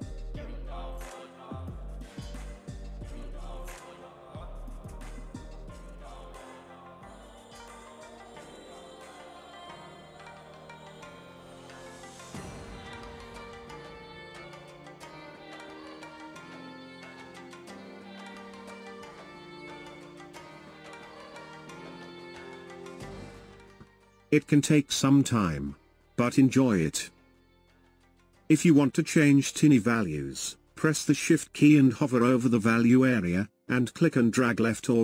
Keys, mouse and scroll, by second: 1.8-5.9 drag, 6.3 shift+click, 11.1 space, 11.3 space, 11.8-13.1 drag, 14.2 shift+click, 15.3 click, 17.0 ctrl+click, 17.5 ctrl+z, 17.6 ctrl+z, 18.2 shift+click, 20.1-22.0 drag, 22.3-25.6 drag, 26.3-33.5 drag, 33.5 ctrl+z.